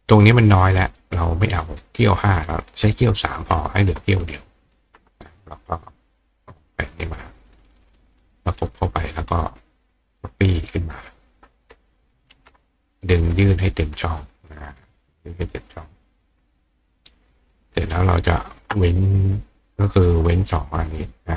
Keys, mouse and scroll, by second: 1.0 click, 1.6 right click, 2.2 click, 3.5-4.7 ctrl+drag, 5.2 click, 6.3 click, 7.1-8.2 drag, 10.2-11.3 drag, 10.4 right click, 13.0 click, 14.7-15.9 drag, 16.3 click, 16.8 click, 17.3 click, 18.5 shift+click, 20.6 click, 21.0 click.